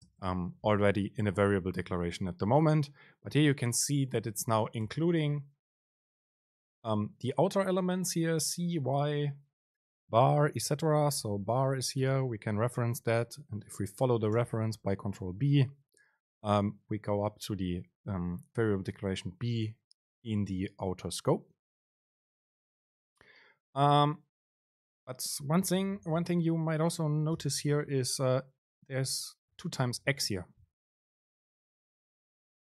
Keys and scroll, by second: 0.3 super+space, 14.8 super+b, 26.1 BackSpace, 28.1 super+space.